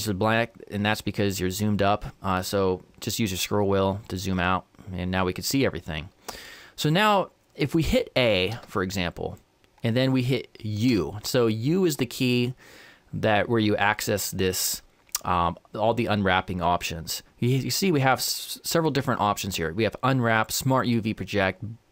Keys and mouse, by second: 5.9-8.5 middle drag, 8.5 a, 10.9 u.